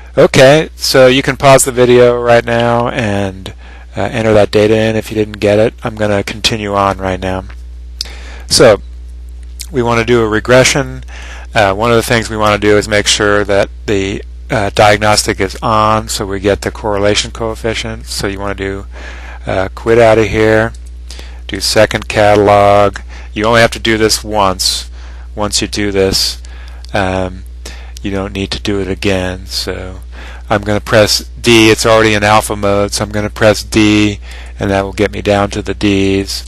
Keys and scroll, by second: 22.9 0, 36.3 Down.